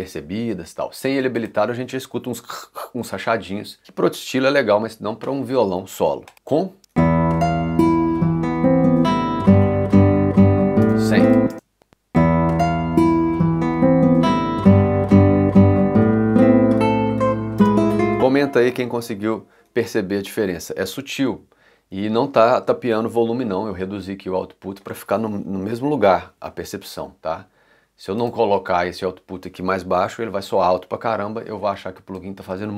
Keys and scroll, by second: 6.8 space, 10.8 space, 17.6 space.